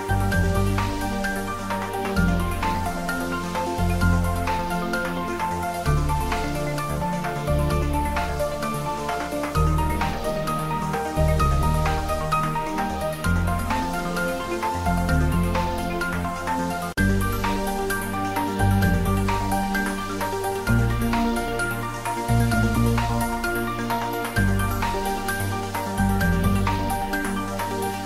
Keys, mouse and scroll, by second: 0.2 ctrl+z, 0.8 click, 1.1 ctrl+z, 1.8 ctrl+z, 2.0-4.1 typing, 3.0 click, 4.8 Return, 5.1 ctrl+s, 5.6-9.4 ctrl+middle drag, 9.4 click, 10.1-13.4 ctrl+middle drag, 13.2-14.4 typing, 18.5 click, 18.9-19.3 typing, 20.0-21.7 ctrl+middle drag, 21.7-24.0 shift+middle drag, 23.7-24.7 typing, 26.6 click, 27.9 shift+z.